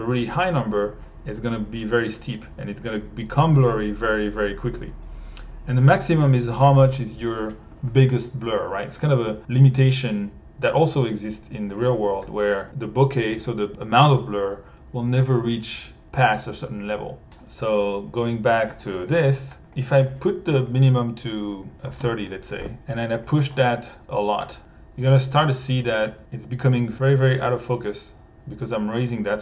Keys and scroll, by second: 18.8 1, 21.8 3, 22.0 Home.